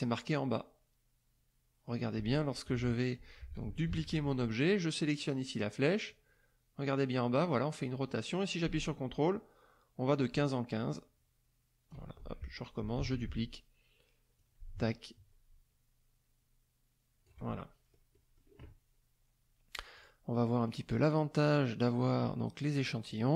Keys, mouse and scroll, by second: 2.6 middle click, 3.8 ctrl+d, 6.0-12.0 drag, 12.1 ctrl+click, 13.0 ctrl+d, 14.3-17.4 ctrl+drag, 17.5 ctrl+click, 20.0 click, 20.6 click, 21.3 click, 23.1 click.